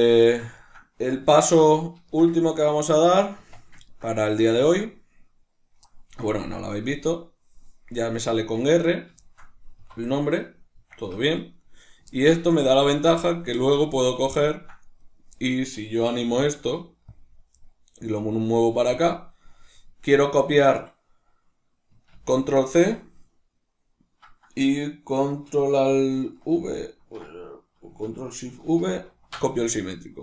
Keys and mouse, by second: 1.2 alt+q, 2.0 shift+middle click, 3.3 Tab, 3.3-6.8 middle drag, 6.8 right click, 8.5 right click, 9.1-11.7 shift+middle drag, 9.7 F2, 11.7 right click, 12.0-14.9 ctrl+middle drag, 12.7 Tab, 14.9 right click, 16.1-17.1 middle drag, 16.1 g, 17.1 click, 18.1 middle click, 18.1 g, 18.9 click, 22.0 ctrl+c, 26.4 ctrl+alt+v, 28.7 ctrl+shift+v.